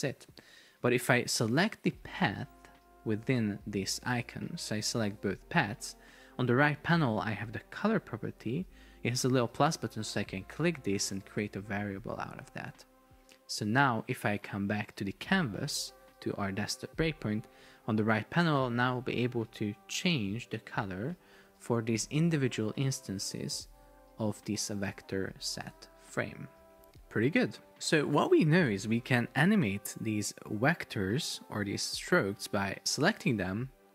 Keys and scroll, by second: 0.7 Return, 22.2 super+d.